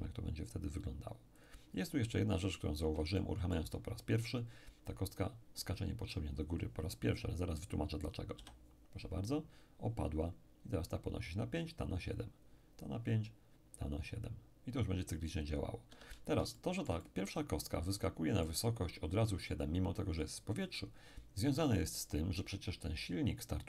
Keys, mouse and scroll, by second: 1.4 click, 2.7-3.1 scroll up 3, 3.1-4.5 shift+middle drag, 8.4 p, 15.9 Escape, 16.5-19.4 shift+middle drag.